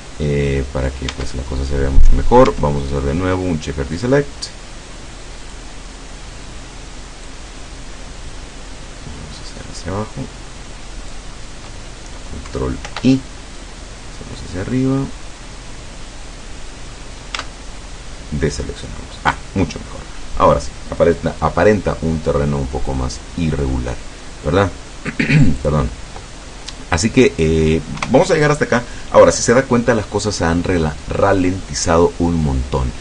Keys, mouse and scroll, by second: 0.3 scroll down 2, 1.1 Tab, 2.6 Tab, 4.0 click, 5.6 click, 7.4-11.4 drag, 12.9 ctrl+i, 13.6-16.9 drag, 17.4 Tab, 22.0 click, 22.3-23.7 middle drag, 24.3-25.0 middle drag, 25.6 click, 26.5-27.5 middle drag, 28.0 KP_0.